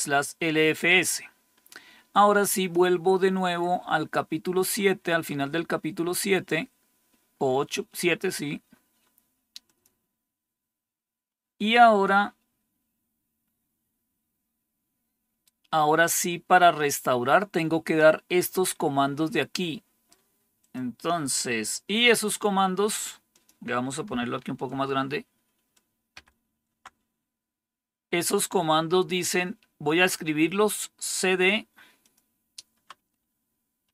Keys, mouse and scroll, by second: 2.4 click, 4.2-4.8 scroll down 2, 5.2 scroll down 1, 6.5-7.2 scroll down 2, 7.2 scroll down 1, 9.6 click, 11.2-13.4 scroll down 5, 14.2-15.5 scroll down 1, 15.5 scroll down 1, 16.2-17.2 scroll down 1, 17.2-20.5 scroll down 1, 20.5 click, 23.2 click, 24.6 ctrl++, 26.0 ctrl++, 28.4-29.9 scroll down 1, 29.9-31.0 scroll down 1, 31.9-33.9 drag.